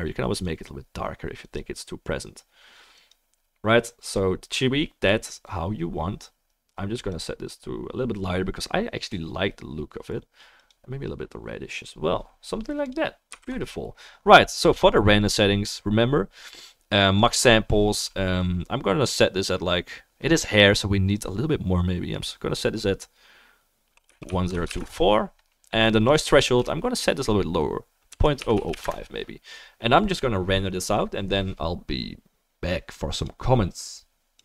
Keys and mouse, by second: 0.4-34.4 middle drag, 12.8 click, 13.4 ctrl+s, 14.8 click, 17.2-34.4 drag, 28.5 0.